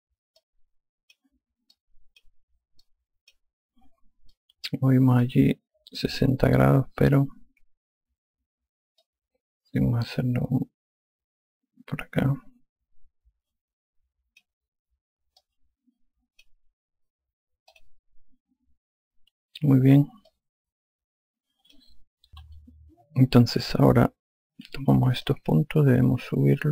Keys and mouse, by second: 0.3 5, 1.2 click, 2.6 shift+click, 5.2 alt+click, 7.9 r, 9.9 click, 16.2 alt+click, 18.6 click, 21.1 alt+click, 25.7 5, 26.3 click.